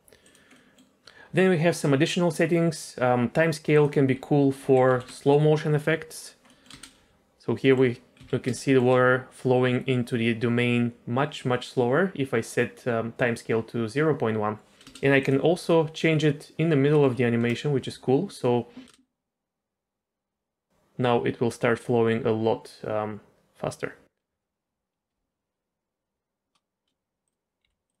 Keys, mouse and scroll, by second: 0.6 middle click, 3.7-5.1 drag, 6.2 click, 6.5 middle click, 6.7 space, 7.7 middle click, 8.2 z, 8.6 shift+middle click, 9.1 scroll up 2, 14.8 space, 15.2-17.4 drag, 18.9 space, 27.3 click, 27.7 g.